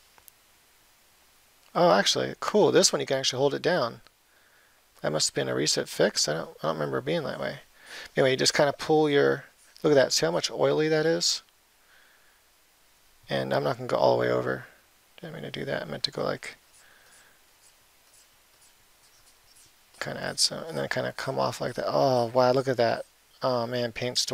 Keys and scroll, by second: 6.0 [.